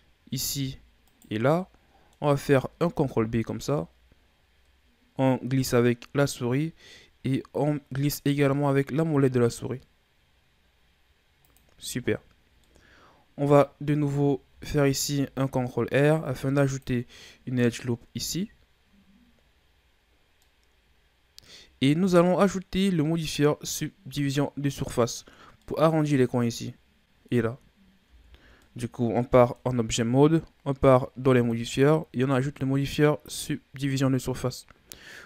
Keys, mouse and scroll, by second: 1.0 shift+right click, 1.5-2.9 middle drag, 2.9 ctrl+b, 12.6-14.5 middle drag, 14.5 ctrl+r, 20.1-20.4 scroll down 1, 20.4-28.0 middle drag, 28.0 Tab, 28.6-31.3 middle drag, 31.3-34.2 drag, 34.2-35.2 middle drag.